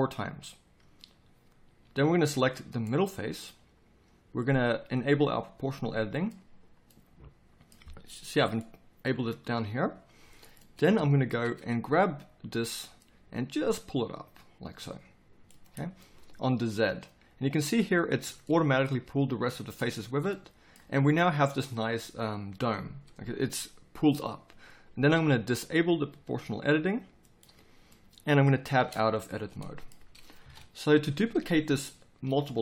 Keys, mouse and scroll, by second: 1.8 a, 5.0-11.3 drag, 14.6 click, 15.7-18.2 middle drag, 18.2 z, 20.0 z, 28.8 Tab, 30.4 KP_7, 30.8 z.